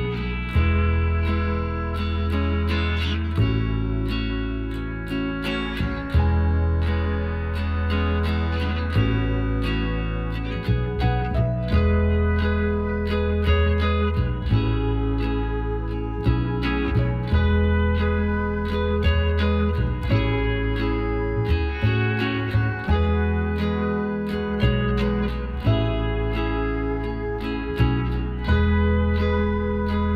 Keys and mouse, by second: 0.5 s, 4.6 Tab, 4.8 middle click, 5.5 middle click, 5.9 Tab, 7.1 z, 8.9-10.6 drag, 9.7-12.0 right drag, 10.9 z, 12.0-13.7 middle drag, 14.7 KP_7, 16.0 z, 17.1 e, 18.5-20.1 drag, 20.9 middle click, 21.7 z, 22.2-24.3 middle drag, 23.5 z, 24.3 z, 24.6 middle click, 25.1 click, 26.3 KP_Divide, 29.6-30.1 middle drag.